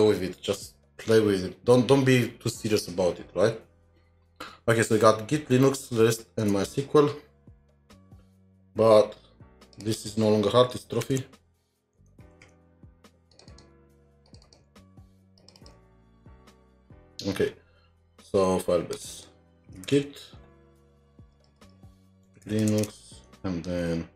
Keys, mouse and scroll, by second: 6.4 alt+Tab, 7.3 scroll down 2, 9.8-11.0 scroll down 2, 10.8-14.7 typing, 13.5 double click, 13.7 ctrl+c, 14.4 double click, 15.6 double click, 15.8 typing, 16.0-16.3 scroll down 2, 16.6-17.3 scroll down 1, 17.3-17.8 scroll up 1, 19.1 typing, 19.1 double click, 21.3-22.9 typing, 21.6 double click, 23.3 alt+Tab.